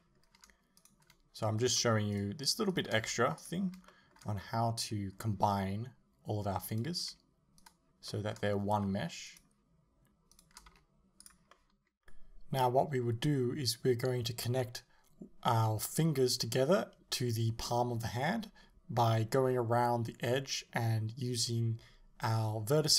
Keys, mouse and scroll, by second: 0.8 right click, 1.6 shift+right click, 2.2 shift+right click, 2.7 shift+right click, 3.5 x, 3.9-6.7 shift+middle drag, 6.7 right click, 7.6 shift+right click, 8.1-9.3 shift+middle drag, 9.3 shift+right click, 10.4 shift+right click, 11.3 x, 11.5-12.5 middle drag, 12.5 right click, 12.9 right click, 13.5 shift+right click, 14.0 shift+right click, 14.5 shift+right click, 15.4 x, 15.8-17.0 middle drag, 17.2 right click, 17.9-19.0 shift+middle drag, 19.0 shift+right click, 19.9-21.7 middle drag, 21.7 shift+right click, 22.3 shift+right click, 22.7-22.9 middle drag.